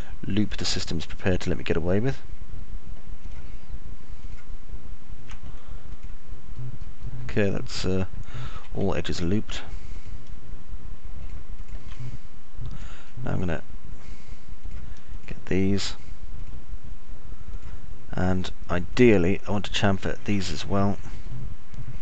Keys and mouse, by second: 3.6 ctrl+click, 4.6 ctrl+click, 7.5-9.1 alt+middle drag, 11.6 ctrl+click, 12.5 middle click, 15.1 ctrl+click, 21.1 middle click, 21.6-22.0 alt+middle drag.